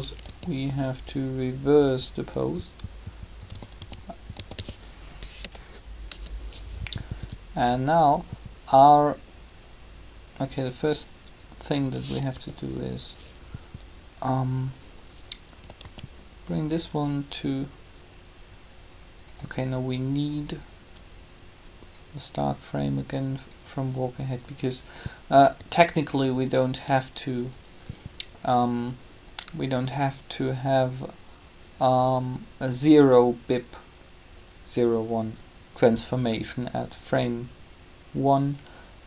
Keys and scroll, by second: 0.0 a, 3.5-5.3 typing, 12.3 g, 15.6 typing, 25.5 typing.